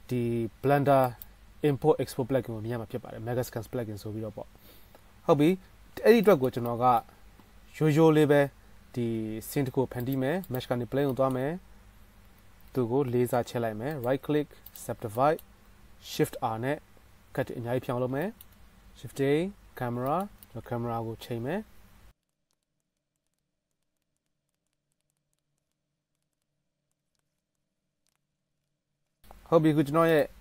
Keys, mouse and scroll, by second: 6.4-9.0 shift+middle drag, 9.0-14.1 shift+drag, 9.1 shift+a, 12.4 Tab, 12.8 s, 16.5 shift+r, 16.8 shift+r, 17.0 shift+r, 17.5 shift+r, 18.8 Tab, 18.8 shift+a, 21.1 ctrl+alt+KP_0, 21.7-22.3 drag, 21.7-22.3 middle drag, 21.7-22.3 right drag, 22.5 q, 23.8-25.9 ctrl+middle drag, 26.1-28.2 shift+middle drag, 27.2 q, 28.2 click, 28.4-30.4 shift+middle drag.